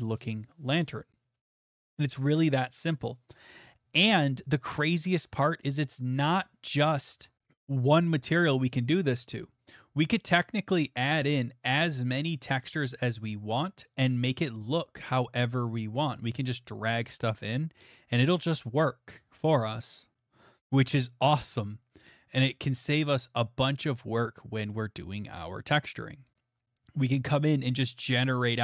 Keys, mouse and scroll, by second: 3.0 scroll, 3.9 middle click, 4.8 middle click, 5.5 middle click, 9.4 middle click, 9.8 middle click, 10.0 middle click, 10.0 middle click, 10.6 middle click, 11.1 shift+middle click, 11.2 shift+middle click, 11.6 middle click, 11.7 middle click, 11.7 middle click, 12.3 middle click, 14.6 click, 16.0 middle click, 17.1 right click.